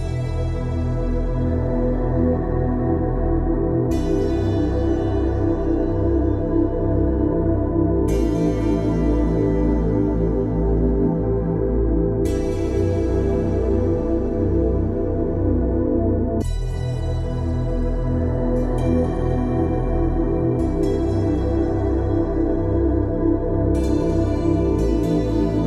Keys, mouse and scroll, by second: 5.2 click, 10.4 click, 12.5-13.6 typing, 15.1-22.8 drag.